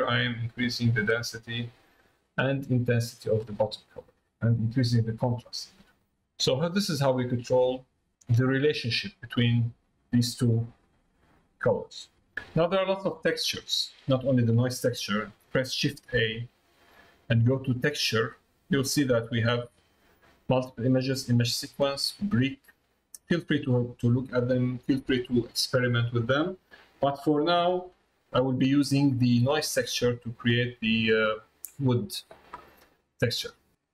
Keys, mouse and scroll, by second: 6.7-7.7 drag, 8.2 click, 12.1 middle click, 13.4 middle click, 14.6 middle click, 29.6 middle click, 31.3 middle click, 32.6 middle click.